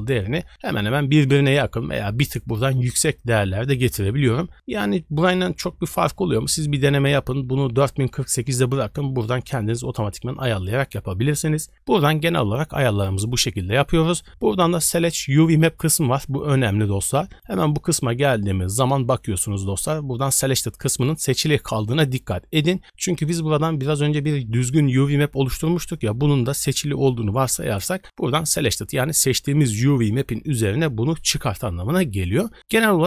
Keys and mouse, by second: 17.3 click.